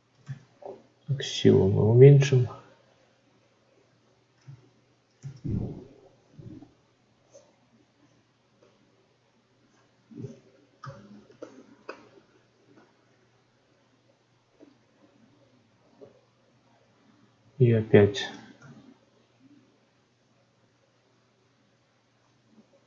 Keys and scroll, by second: 0.1 ctrl+z, 4.3 ctrl+z.